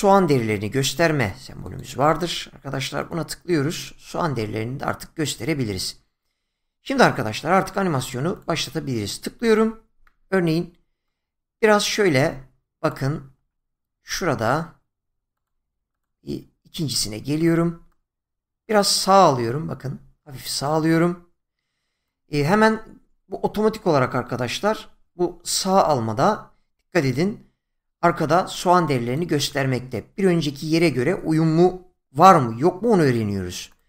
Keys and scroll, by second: 13.2 ctrl+z, 27.0 <, 29.5 <.